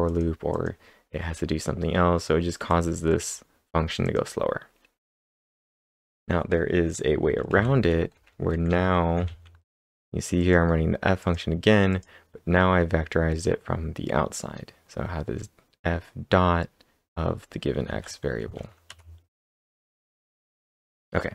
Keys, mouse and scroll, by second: 0.5 click, 2.7 click, 3.1 click, 4.1 click, 4.9-5.8 scroll down 1, 5.8 click, 7.5 ctrl+/, 8.2 j, 9.2 ctrl+/, 10.4 click, 11.2 click, 11.9 click, 11.9 click, 17.2 click, 17.2-17.7 scroll up 2, 17.9 ctrl+s, 18.4 ctrl+`, 18.9 Up, 19.9 Return.